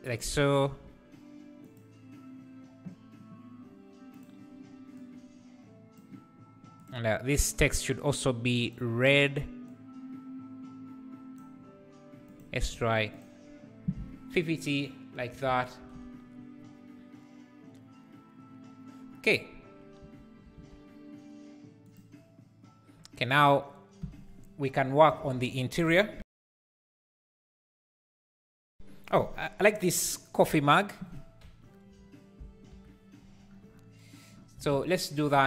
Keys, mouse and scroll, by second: 1.6 KP_0, 4.9 Left, 6.9 Left, 9.6 Left, 13.1 Left, 13.1 click, 15.2 click, 20.6 alt+a, 21.8 click, 23.4 click, 24.0 Delete, 30.9 click, 33.0 KP_1.